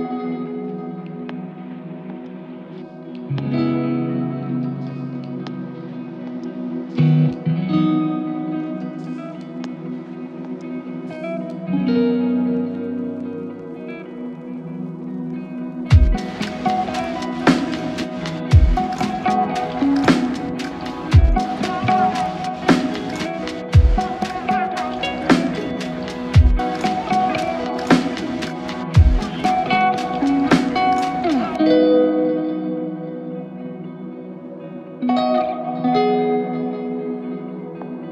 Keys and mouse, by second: 2.9 f, 4.5 ctrl+click, 5.4 ctrl+i, 10.7 ctrl+click, 11.6 ctrl+i, 12.1 ctrl+click, 15.1 f, 18.5 double click, 23.1 f, 23.8 double click, 27.1 f, 27.2 shift+click, 29.1 shift+click, 32.3 ctrl+alt+click, 33.0 alt+click, 34.9 ctrl+alt+click, 37.0 typing.